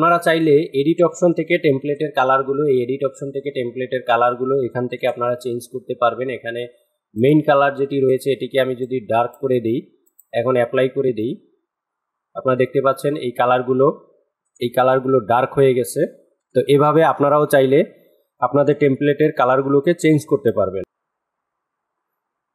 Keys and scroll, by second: 1.4 KP_2, 4.4 KP_2, 13.9 KP_2, 15.8 KP_2.